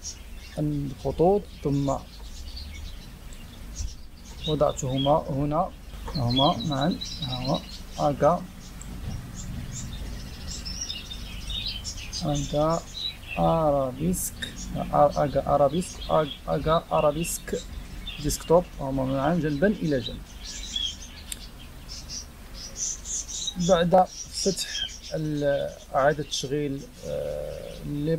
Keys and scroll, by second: 2.1-3.2 typing, 5.7-6.4 typing, 22.4 ctrl+h.